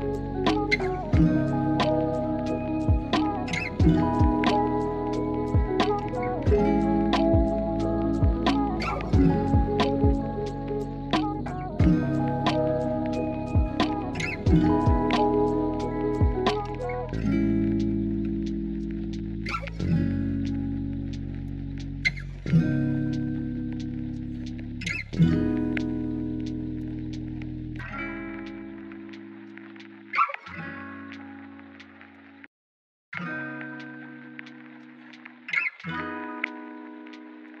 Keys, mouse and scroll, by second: 1.2 ctrl+r, 1.5 click, 1.8 Tab, 2.3-2.6 middle drag, 2.9 alt+z, 3.3-4.6 middle drag, 7.3 ctrl+s, 8.0 KP_1, 9.5 drag, 11.5-11.9 drag, 12.2 s, 13.5 click, 13.8 click, 15.5 click, 16.0 shift+middle drag, 17.0 click, 17.2 click, 17.8-19.4 middle drag, 19.7-20.3 scroll up 2, 20.3-21.1 middle drag, 21.3 shift+click, 22.9 ctrl+p, 24.5 click, 25.2 KP_1, 26.2 ctrl+s, 26.4 shift+middle drag, 27.1 r, 30.0 g, 30.7 r, 31.5 ctrl+z, 32.4 ctrl+z, 32.4 click, 32.6 Tab, 33.1 alt+z, 33.7 click, 34.4 click, 35.3-37.0 drag, 37.2 Tab, 37.3-37.6 drag.